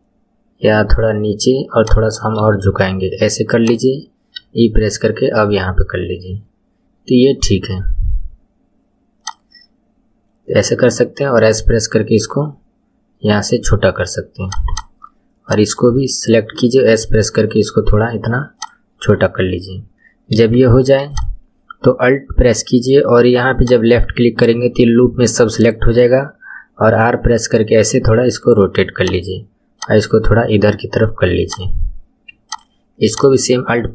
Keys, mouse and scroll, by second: 2.3 r, 4.3 e, 10.8 s, 14.6 click, 15.4 click, 16.5 s, 19.9-20.5 scroll up 3, 20.5 shift+middle click, 21.1 click, 23.6 alt+click, 25.9 r, 29.7 click, 31.4 click, 32.4 alt+click, 33.1 alt+click.